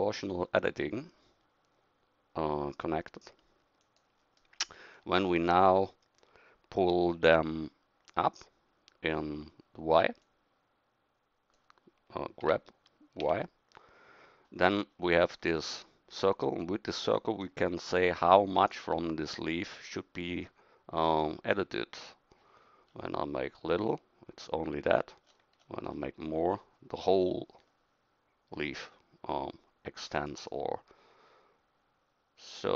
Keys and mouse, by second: 12.4 g.